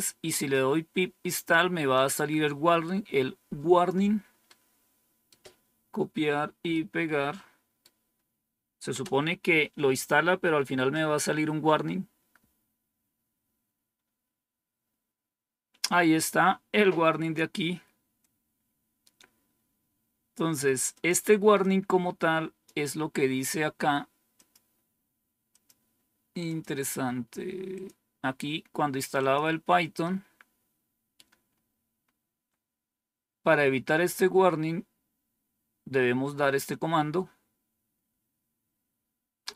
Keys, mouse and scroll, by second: 1.8-3.8 drag, 4.4 right click, 6.6-7.8 right drag, 8.8 Return, 18.1-20.3 drag, 20.8 click, 21.5 click, 24.2 click, 25.4 click, 26.3 click, 27.6 click, 29.1 click, 30.2 scroll down 2, 31.4 scroll up 2, 31.9-32.4 scroll down 3, 33.0-33.8 scroll down 2, 33.8-39.5 scroll up 1.